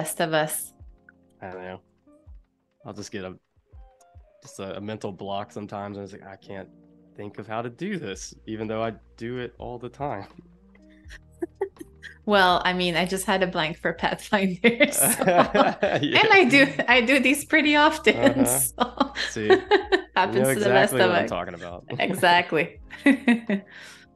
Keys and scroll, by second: 0.1 super+y, 0.4 a, 1.9 shift+super+[, 4.0 space, 5.2 super+-, 6.0 super+=, 12.9 shift+m, 14.8 a, 16.5 super+c, 16.8 super+z, 18.3 BackSpace, 21.5 super+f.